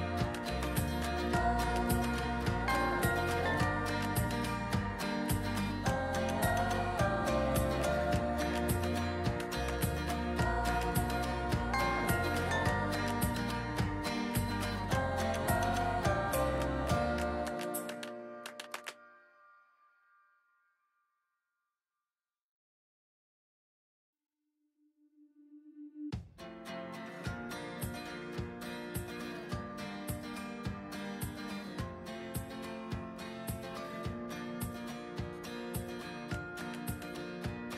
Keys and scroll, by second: 5.9 ctrl+d, 17.8 x, 25.1 ctrl+z.